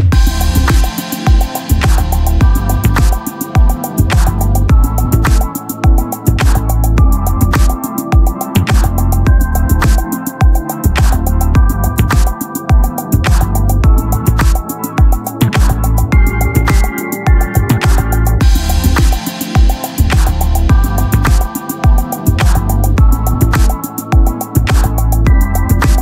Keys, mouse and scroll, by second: 1.4-2.4 drag, 4.2 ctrl+l, 7.2 KP_0, 14.1-15.4 drag, 15.4 ctrl+l, 15.4 right click, 19.7-21.7 right drag, 20.2-21.7 drag, 24.6-26.0 drag.